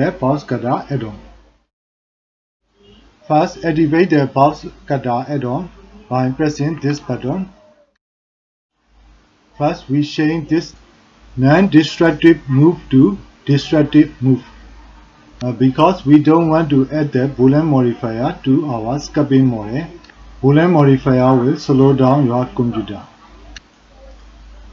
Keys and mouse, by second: 5.1 click, 10.3-13.0 drag, 24.2-24.7 drag.